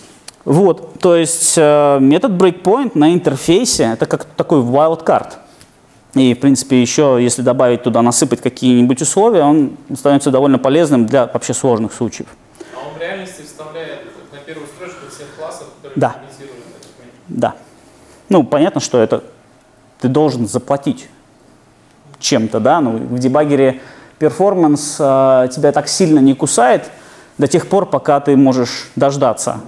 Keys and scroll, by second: 13.6 super+F2.